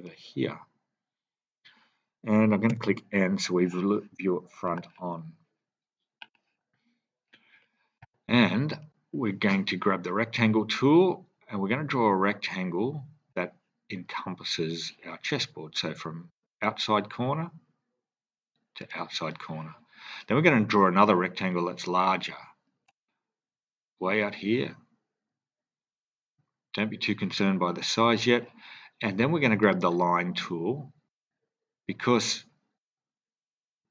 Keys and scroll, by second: 2.6 n.